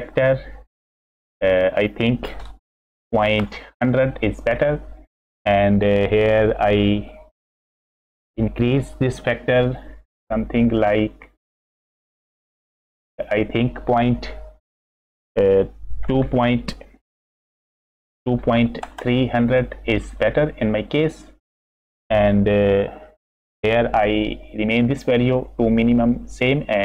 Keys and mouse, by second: 1.9-3.9 drag, 3.4 KP_0, 3.9 middle click, 9.8-12.8 drag, 13.1-19.4 drag, 19.0 KP_0, 20.2-20.7 middle drag.